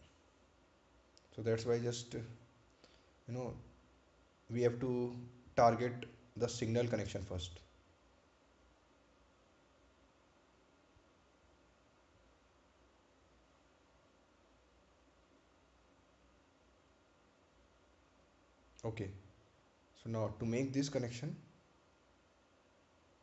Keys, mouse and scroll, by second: 7.1 ctrl+click, 7.2 ctrl+click, 21.7 scroll up 1.